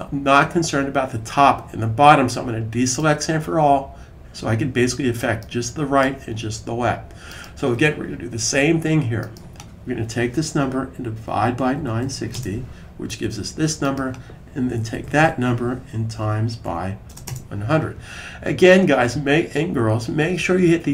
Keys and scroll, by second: 10.8-12.5 typing, 14.5 Right, 14.7 Right, 14.7 typing, 14.8 Right, 15.0 Right, 15.7-17.6 typing, 19.4 typing.